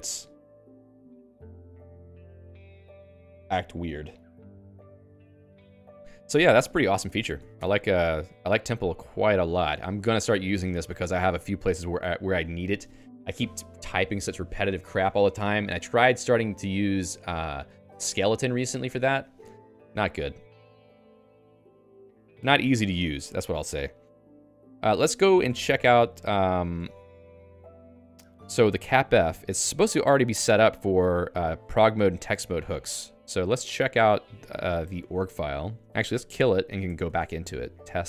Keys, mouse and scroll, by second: 7.3 ctrl+g, 7.4 ctrl+g, 7.5 Escape, 21.5 ctrl+alt+j, 21.7 Return, 23.4 ctrl+alt+j, 25.0 ctrl+g, 26.1 ctrl+j, 26.8 Return, 27.2-31.9 typing, 32.5 ctrl+alt+j, 32.8 Return, 34.8 ctrl+alt+j, 35.3 r, 35.6 Return, 36.2 Return, 37.1 ctrl+f, 37.8-38.0 typing.